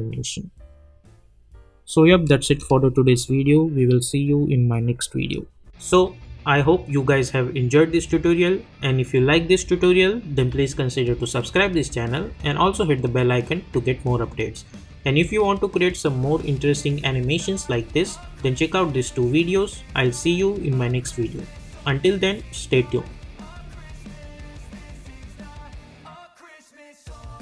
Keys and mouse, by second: 2.0 space, 4.9 space.